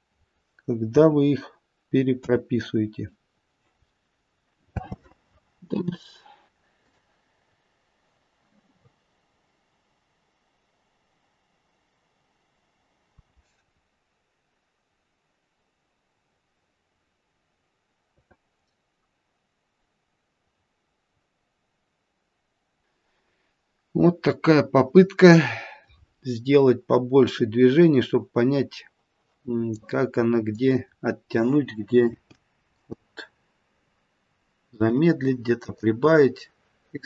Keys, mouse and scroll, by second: 0.9 KP_2, 2.2 KP_3, 4.8 space, 6.8 click, 13.2-14.3 scroll up 2, 16.2-16.7 scroll down 1, 17.2-17.7 scroll up 1, 20.5-21.5 scroll down 3, 29.6 click, 32.0 g, 34.6 g.